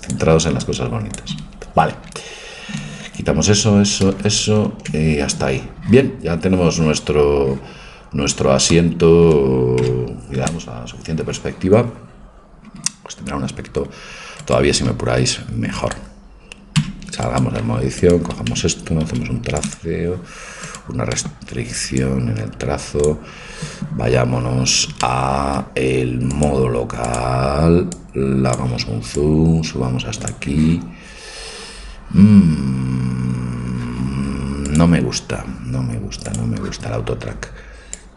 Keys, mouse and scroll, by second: 3.2 ctrl+z, 3.7 ctrl+z, 4.1 ctrl+z, 8.3-9.9 middle drag, 12.0 KP_0, 12.2 middle click, 16.8 Tab, 16.8 click, 17.5-19.8 right drag, 19.8 ctrl+t, 20.7 click, 20.8 right click, 20.9 click, 21.1-22.9 middle drag, 22.1 click, 22.1 right click, 22.9-29.2 drag, 30.8 click, 37.9-38.1 drag.